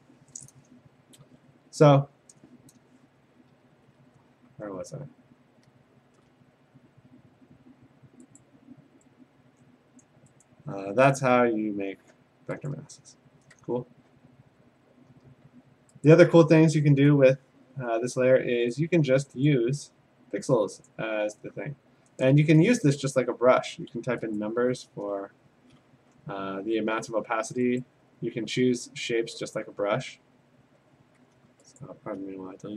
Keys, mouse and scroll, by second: 3.8-5.7 ctrl+scroll, 6.0 scroll, 8.4 click, 10.0 click, 10.4 click, 11.1 ctrl+z, 12.7 click, 13.5 Tab, 14.6 Tab, 16.1 click, 19.0 click, 19.5 click, 20.9 click, 23.2 click, 24.4 click, 24.7 4, 25.3 Escape, 26.0 4, 27.8 click, 29.6 click, 31.8 shift+click.